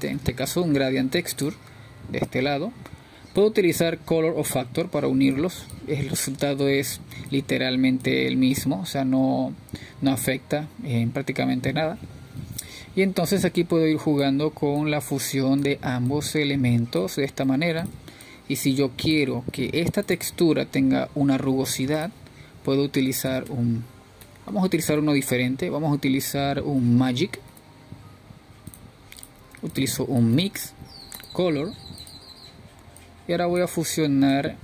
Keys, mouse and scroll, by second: 7.0-10.0 scroll up 3, 10.0 click, 11.4 click, 17.0-30.8 drag, 30.8 BackSpace, 32.5-34.5 drag, 34.5 shift+a.